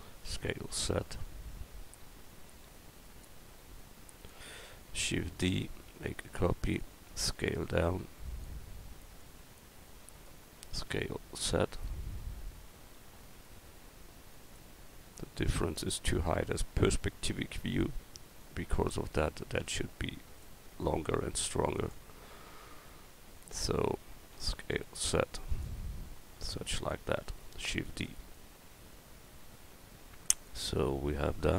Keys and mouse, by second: 0.3 s, 3.8-5.3 drag, 5.3 shift+d, 7.2 s, 10.8 s, 18.4-20.4 drag, 19.6 s, 21.1 s, 24.4 s, 26.2-27.8 drag, 27.8 shift+d, 27.9 click.